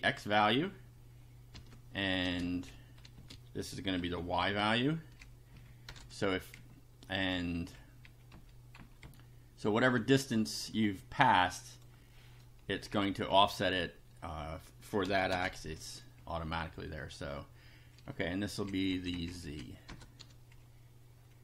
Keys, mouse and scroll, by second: 1.5 ,, 2.3 space, 2.5 BackSpace, 3.5 ctrl+space, 3.9 ctrl+v, 4.5 ctrl+Left, 5.5 Right, 5.9 BackSpace, 5.9 1, 6.5 Right, 8.3 Up, 8.8 End, 9.0 Left, 11.7 click, 12.7 Left, 13.3 Right, 15.0 ,, 15.3 space, 15.7 ctrl+v, 18.0 Left, 19.9 BackSpace, 20.2 2.